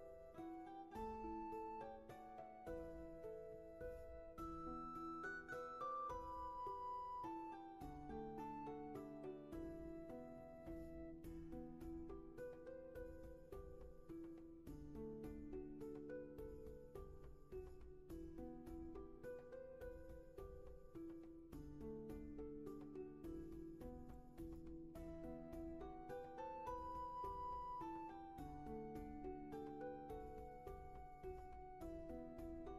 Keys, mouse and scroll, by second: 4.3 ctrl+z, 8.6 ctrl+z, 11.2 ctrl+z, 14.1 ctrl+z, 17.8 ctrl+z.